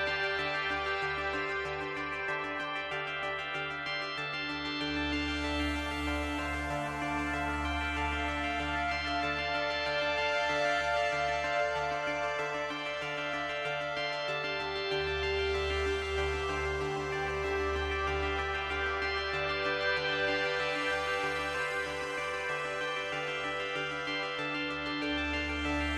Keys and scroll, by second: 7.4 ctrl+z.